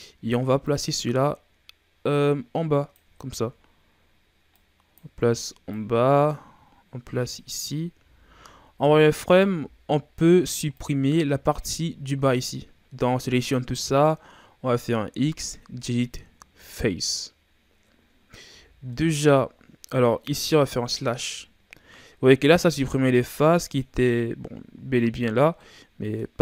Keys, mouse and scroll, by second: 0.6-3.2 drag, 3.2-3.5 ctrl+scroll down 1, 3.5-4.5 scroll up 2, 4.5-7.9 drag, 7.9 z, 9.1 right click, 9.5 b, 15.1 x, 18.0-18.5 scroll down 4, 18.5 z, 18.9-20.7 middle drag, 20.7 KP_Divide, 22.7-26.4 middle drag.